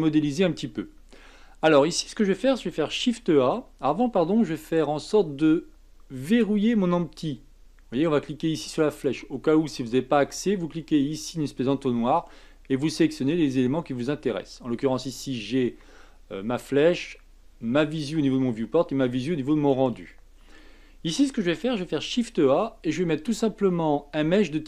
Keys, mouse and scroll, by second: 0.3-1.7 scroll up 2, 1.7-3.0 scroll up 1, 3.0 shift+a, 8.9 click, 10.2-13.2 drag, 22.0 shift+a.